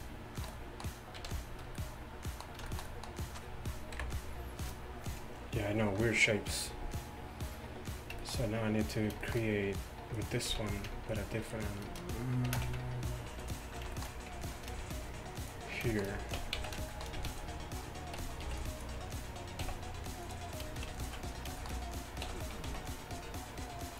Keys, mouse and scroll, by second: 1.2 a, 4.0 KP_1, 10.5 z, 12.6 shift+d, 16.4 Tab, 16.6 z, 17.2 z, 18.5 b, 19.7 x, 22.3 e.